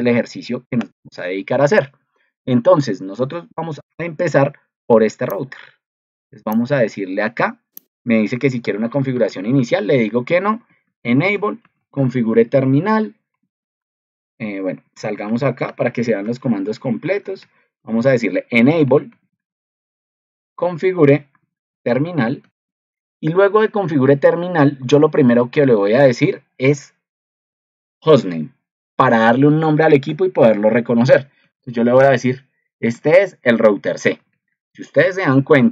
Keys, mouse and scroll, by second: 0.9 ctrl+alt+3, 35.2 ctrl+2.